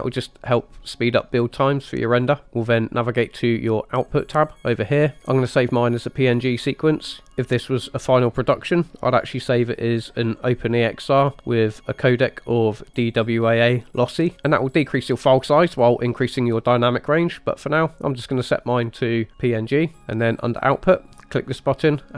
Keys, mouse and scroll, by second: 2.4 click, 4.1-5.2 drag, 5.2-6.9 scroll down 7, 7.3 click, 10.6 drag, 12.2-13.3 drag, 17.6-19.5 drag, 21.8 click.